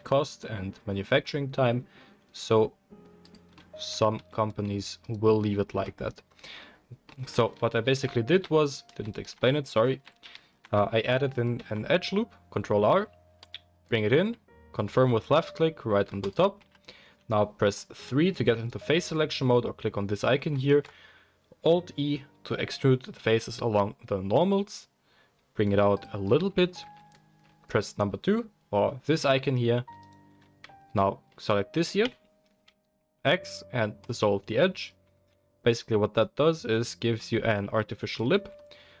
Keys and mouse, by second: 4.1 2, 5.0 alt+click, 5.1-8.3 alt+middle drag, 5.9 x, 7.7 ctrl+z, 7.9 ctrl+z, 8.3 ctrl+z, 9.3 ctrl+z, 9.9 ctrl+z, 10.2 ctrl+z, 11.6 ctrl+r, 16.5 3, 18.5 alt+click, 20.7 alt+e, 26.8 2, 29.3-39.0 middle drag, 32.1 x, 38.2 Tab.